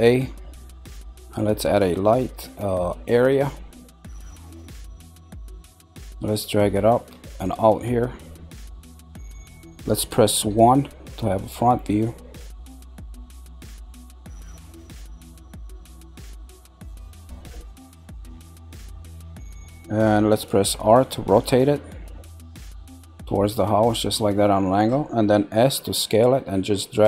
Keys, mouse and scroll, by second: 5.5 click, 7.4 click, 12.7 click, 16.4-17.9 shift+middle drag, 17.9 click, 23.8 r, 25.9 s.